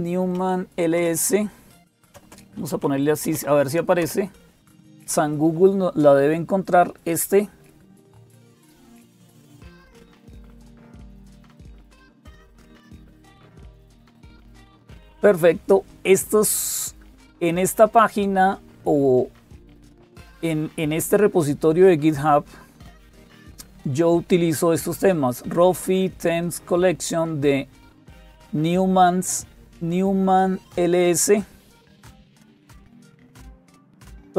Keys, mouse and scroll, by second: 0.0-34.3 typing, 7.8 click.